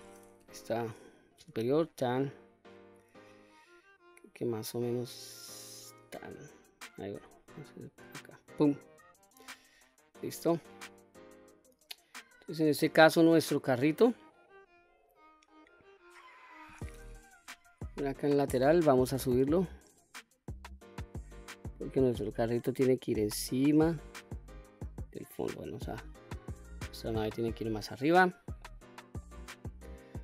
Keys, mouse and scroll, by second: 0.2 KP_7, 1.2 s, 5.6 click, 6.9 s, 8.3 click, 9.2 middle click, 10.1-11.9 middle drag, 13.1 click, 14.5-15.1 scroll up 4, 17.2 KP_3, 19.0-25.2 drag, 25.6 scroll down 1, 26.2 click, 27.2-28.0 drag, 28.4-29.0 middle drag, 29.3-30.2 middle drag.